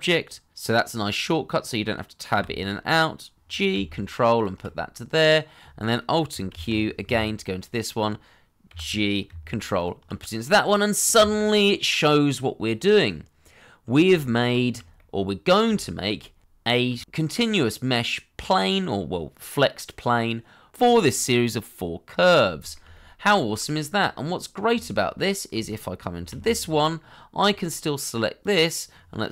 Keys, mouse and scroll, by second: 2.3 g, 4.3 ctrl+click, 6.5 alt+q, 8.7 g, 9.7 ctrl+click, 11.5 middle click, 13.9 shift+middle click, 14.3 middle click, 14.8 shift+middle click, 15.2 scroll down 1, 15.3 middle click, 15.8 shift+middle click, 17.1 scroll up 1, 17.4 middle click, 19.2 shift+middle click, 20.0 middle click, 21.4 shift+middle click, 23.4 middle click, 23.8 shift+middle click, 24.3 scroll down 1, 24.5 middle click, 24.9 shift+middle click, 26.3 alt+q.